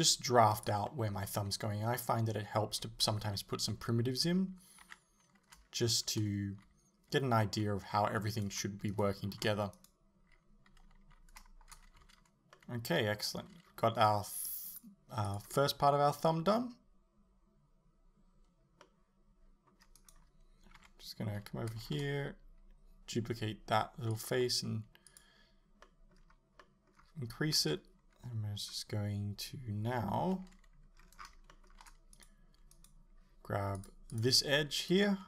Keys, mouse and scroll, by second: 0.0 g, 0.7 click, 0.9-2.1 middle drag, 1.4 g, 2.1 click, 3.3 a, 4.9 KP_7, 8.4 right click, 8.9 shift+right click, 9.8 right click, 12.0 a, 12.6-14.8 middle drag, 15.3 click, 18.9-20.0 middle drag, 20.0 right click, 20.8 KP_7, 21.9 shift+d, 24.3 click, 24.4 e, 25.2 click, 25.9-33.8 middle drag, 27.6 KP_3, 30.0 KP_7, 31.0-31.5 scroll up 2, 33.8 click, 34.1 click, 34.9 right click.